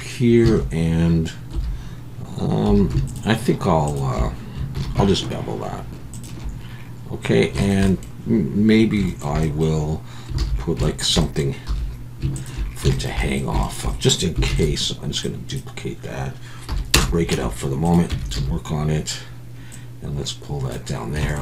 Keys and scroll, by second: 0.5 alt+a, 1.5 3, 2.7 2, 4.8 ctrl+b, 10.4 alt+a, 11.7 2, 14.5 shift+d, 16.7 p, 17.3 Tab, 18.1 Tab, 18.3 a.